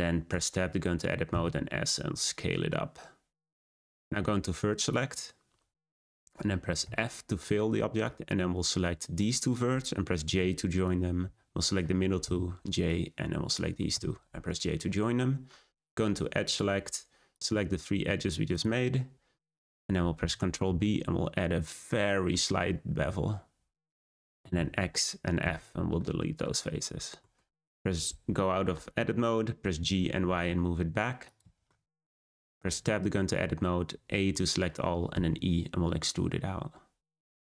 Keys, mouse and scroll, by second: 0.2 Tab, 1.2 s, 4.8-6.8 drag, 6.8 f, 8.0 click, 10.2 j, 10.8 click, 12.2 j, 12.8 click, 13.9 j, 15.3-16.4 scroll up 1, 16.4 click, 18.5 shift+click, 19.4 shift+click, 19.8-20.2 scroll up 2, 20.6 b, 24.5 x, 25.9 middle click, 26.7-27.1 scroll down 2, 27.1 Tab, 29.6 g, 31.6-32.5 shift+middle drag, 32.5 Tab, 32.9-33.4 scroll up 1, 33.4 a, 35.1 e.